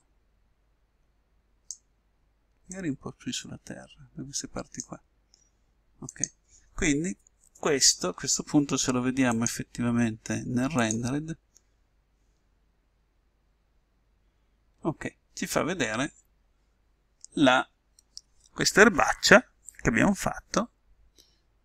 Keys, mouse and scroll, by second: 6.1-8.0 drag, 9.3-11.3 drag.